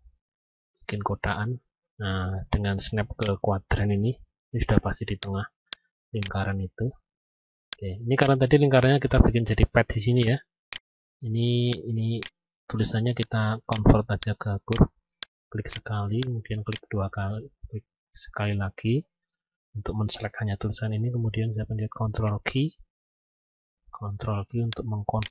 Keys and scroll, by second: 22.0 ctrl+q.